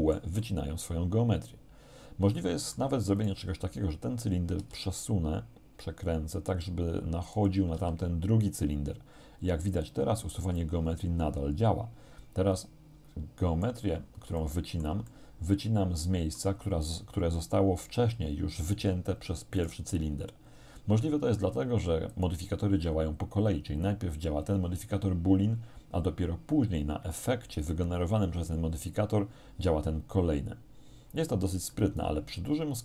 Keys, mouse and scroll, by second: 3.2 right click, 3.5-5.3 middle drag, 4.6 r, 7.4 click, 7.8 g, 9.7 click, 10.3-13.9 middle drag, 14.4-16.6 shift+middle drag, 19.6 right click, 22.1 right click, 31.7-32.8 middle drag.